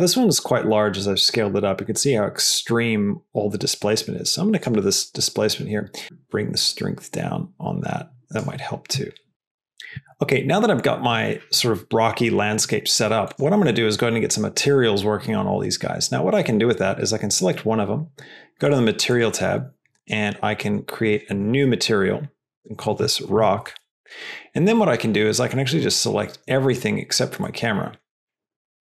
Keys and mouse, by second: 0.1 g, 4.5 click, 6.6-8.4 drag, 18.6 drag, 20.0 click, 21.0 click, 21.2 click, 27.4 middle click, 28.5 shift+click.